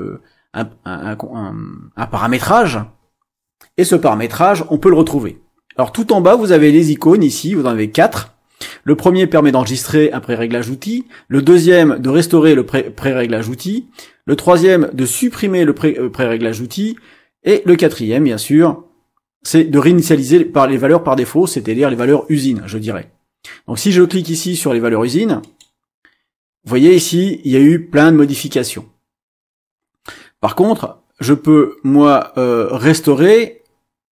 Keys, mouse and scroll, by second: 25.4 click, 33.0 click.